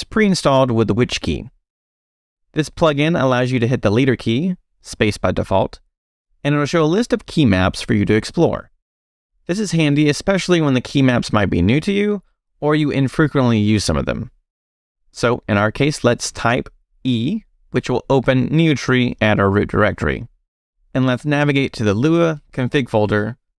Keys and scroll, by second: 4.8 space, 16.7 e, 19.9 j, 20.6 Return, 21.2 j, 22.3 Return.